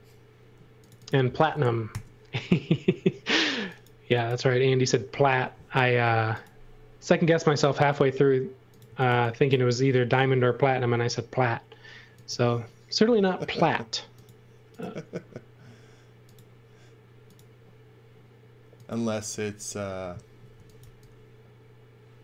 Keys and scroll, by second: 1.9 shift+g, 5.1 m, 8.6-9.6 typing, 10.7 m, 20.5 x, 20.8 v.